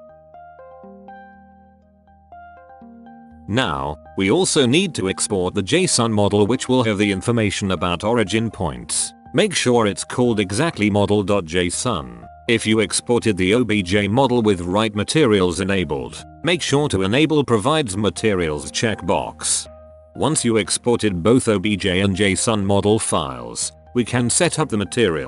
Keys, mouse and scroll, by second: 3.3 middle click, 5.1-7.2 drag, 18.6-19.4 middle drag, 19.9 middle click.